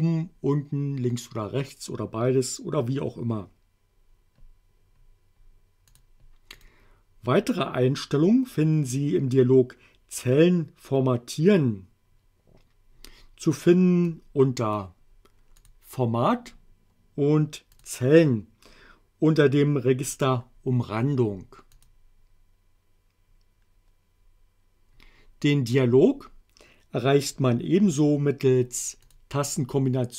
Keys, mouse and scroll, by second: 5.9 click, 6.6 click, 14.1-15.0 drag, 15.6 click, 17.7 click, 21.8 click, 27.3 click, 29.1 click.